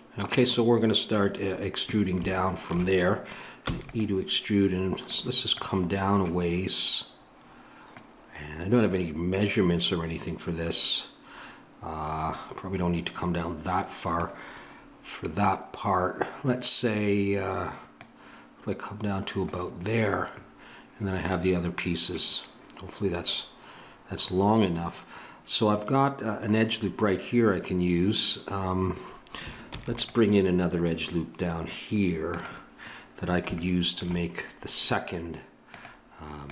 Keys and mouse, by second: 2.3-5.5 middle drag, 5.5 click, 6.6-14.1 drag, 17.9-29.6 drag, 29.6 ctrl+r, 32.9-36.5 middle drag.